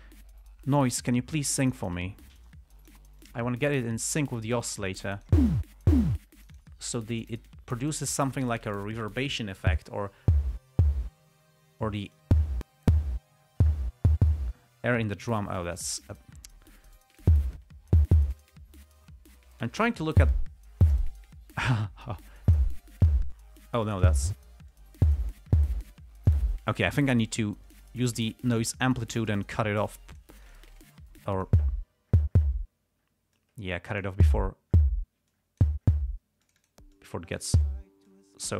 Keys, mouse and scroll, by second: 1.1 click, 2.0 click, 2.8-3.4 drag, 3.5-5.8 drag, 6.7 click, 7.2-9.0 drag, 12.2 click, 16.2 click, 16.8-17.7 drag, 18.7-20.2 drag, 22.1-23.1 drag, 23.7 click, 25.0-25.7 drag, 26.2-26.8 drag, 28.0 click, 29.6-31.1 drag, 31.1-32.0 drag, 33.7-34.6 drag, 35.6-36.1 drag, 36.8 click, 37.3-37.9 drag, 38.4-38.5 drag.